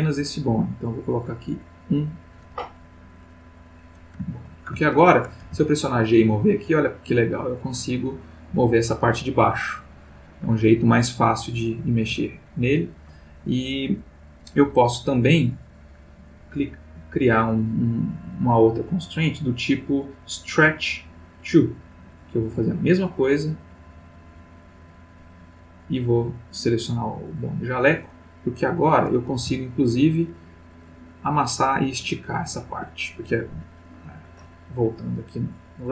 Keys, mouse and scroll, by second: 1.7 click, 3.6 click, 4.3-4.9 ctrl+middle drag, 5.4-7.2 middle drag, 5.4 g, 12.0 Escape, 15.5 click, 17.3 click, 18.1 click, 20.9 click, 22.5 click, 24.2 click, 25.8 click, 27.3 click, 28.8 click, 29.3 g, 32.7 Escape, 34.0 click, 35.5 click.